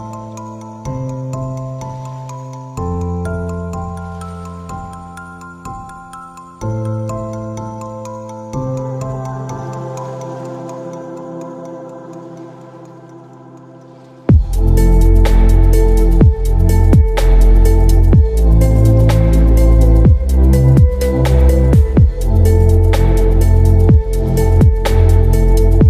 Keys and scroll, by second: 6.8 space, 9.3 space, 19.6 space, 22.1 space, 25.4 ctrl+alt+r.